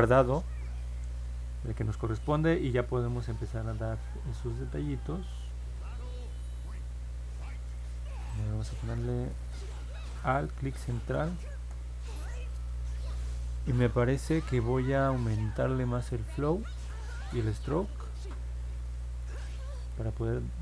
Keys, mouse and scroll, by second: 0.0 middle click, 6.0 click, 6.4 click, 6.8 click, 10.5-11.6 alt+middle drag, 15.8 click, 17.1 click.